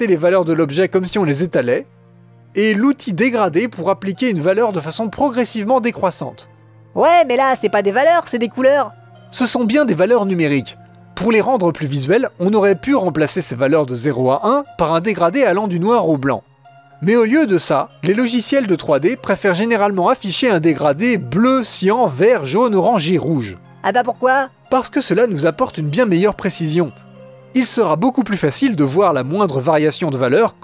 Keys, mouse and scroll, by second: 0.2 middle click, 0.3 scroll up 2, 0.5 middle click, 0.7 scroll down 1, 0.9 middle click, 1.2 click, 1.8 middle click, 2.1 click, 2.5 middle click, 2.8-4.3 drag, 4.3 middle click, 6.2 scroll down 1, 6.4-7.9 middle drag.